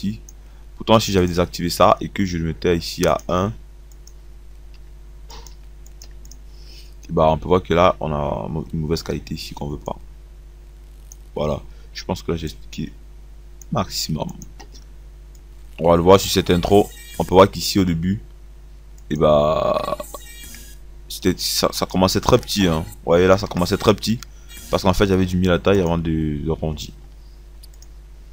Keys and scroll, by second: 17.1 space.